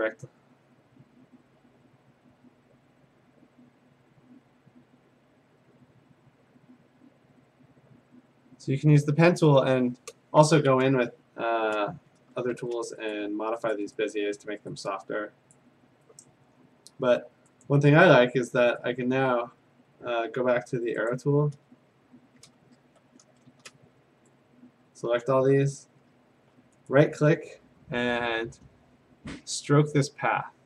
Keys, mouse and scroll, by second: 0.6 click, 1.9 click, 2.2 click, 3.2 click, 4.3 click, 7.3 click, 8.2 click, 9.0 click, 10.7-11.6 scroll, 11.9 a, 12.6 shift+a, 13.1 click, 13.8 click, 14.2 click, 15.6 click, 17.7 click, 17.9 a, 18.8 right click, 21.1 click, 21.6 a, 21.8 scroll, 22.5 scroll down 2, 22.6-23.2 scroll, 23.5 a, 25.3 click, 25.8-26.6 scroll, 26.9 right click.